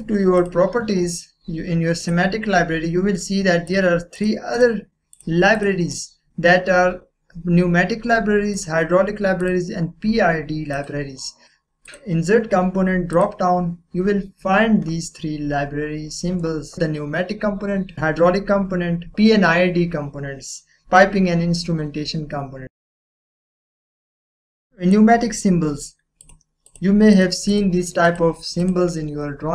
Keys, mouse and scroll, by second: 0.3 click, 8.5 click, 10.0 click, 19.1 click, 23.0 click, 24.0 click, 24.5-26.2 drag.